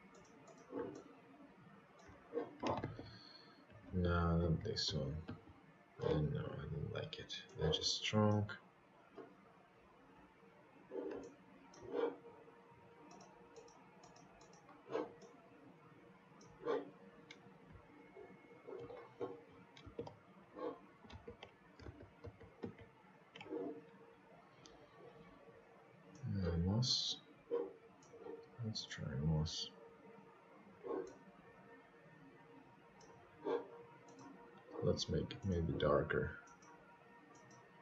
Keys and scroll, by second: 10.8 ctrl+z, 12.1 ctrl+z.